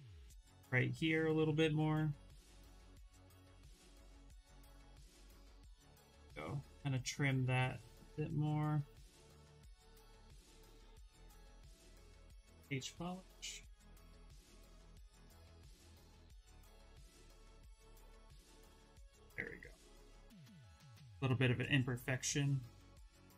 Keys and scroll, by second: 1.1 ctrl+z, 4.8-6.0 typing, 11.7-12.7 typing, 14.9 ctrl+z, 15.0 ctrl+z.